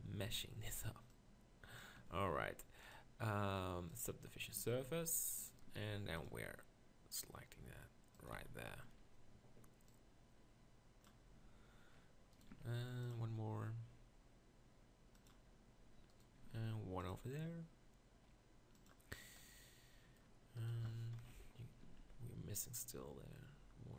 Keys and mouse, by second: 0.3 z, 2.0 Tab, 4.6 Tab, 4.8 z, 5.7 ctrl+r, 8.4 z, 12.0 middle click, 12.6 ctrl+r, 16.4 ctrl+r, 19.1 middle click, 21.2 ctrl+KP_Decimal, 21.8 ctrl+r.